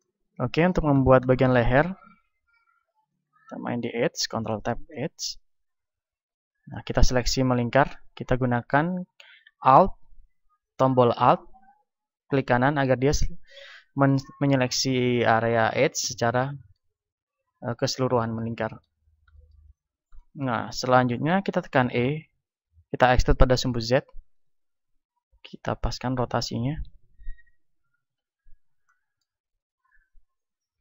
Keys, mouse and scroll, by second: 2.1 ctrl+Tab, 6.1-7.8 drag, 8.8 a, 12.2-16.3 right drag, 16.3-23.4 middle drag, 22.2 e, 24.5-26.7 drag, 25.1 r, 28.1 click, 28.1 KP_1, 29.0-30.7 middle drag, 30.7 r.